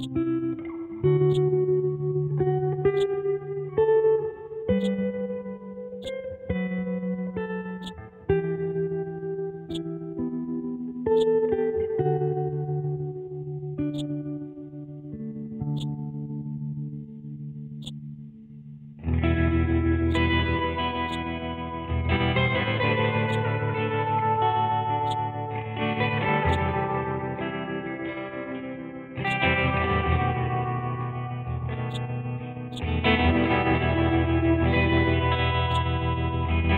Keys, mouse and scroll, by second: 7.8-9.7 drag, 9.7-13.0 drag, 13.0-13.8 scroll up 1, 13.9 alt+click, 14.5-15.4 scroll down 1, 15.7-21.0 drag, 22.2 ctrl+z, 23.2-25.0 drag, 25.0-29.1 drag, 29.2-31.0 drag, 31.0-31.9 scroll down 1, 31.9 click, 34.4-35.3 scroll up 1, 35.7 click.